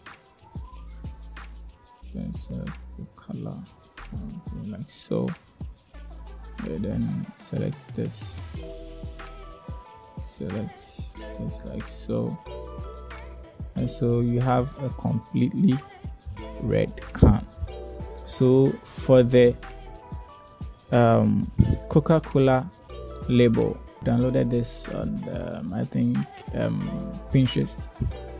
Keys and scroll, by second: 23.5 shift+a, 25.7 r, 25.9 g, 26.2 m.